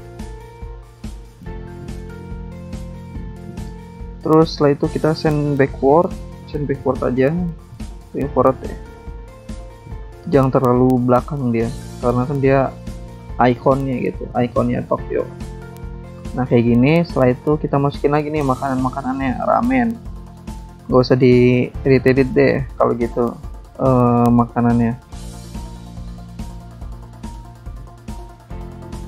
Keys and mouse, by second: 2.1 click, 2.9 click, 4.5 click, 6.1 click, 7.1 click, 9.0 click, 9.0 click, 10.0 shift+click, 10.9 click, 13.1 click, 13.3 click, 13.9 click, 14.0 click, 14.0 click, 14.1 click, 14.2 click, 14.3 double click, 14.4 click, 14.5 click, 15.8 double click, 17.0 click, 17.9 click, 19.5 click, 20.9 click, 23.9 alt+Tab, 24.8 click, 24.9 click, 26.3 click, 26.5 alt+Tab, 28.0 shift+click.